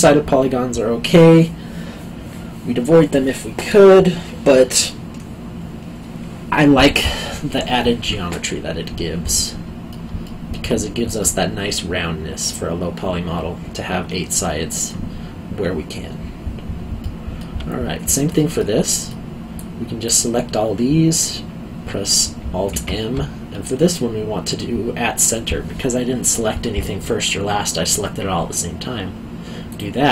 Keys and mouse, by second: 9.3 middle click, 10.2 alt+middle click, 17.0 alt+middle click, 18.3 alt+middle click, 19.5 click, 22.7 alt+m, 29.7 click.